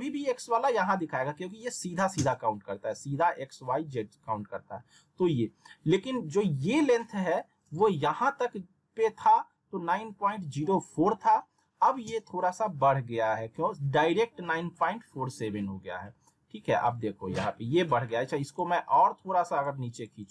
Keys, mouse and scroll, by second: 18.5-20.3 drag.